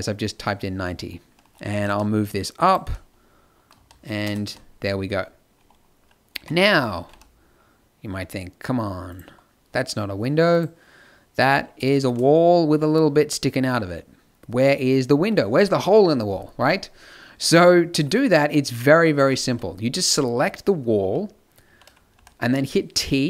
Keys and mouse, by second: 1.7 g, 2.9 middle click, 3.7 z, 4.2 KP_0, 4.4 z, 6.3 g, 19.4-22.1 typing.